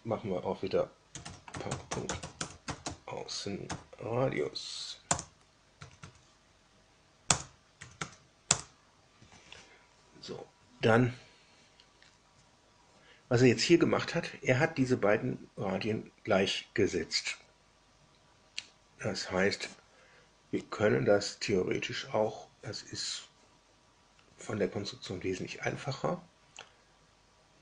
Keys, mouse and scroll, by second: 0.8-3.6 typing, 5.0 Return, 5.8 Tab, 5.9 Tab, 7.2 Return, 7.7 Tab, 7.9 Tab, 8.4 Return.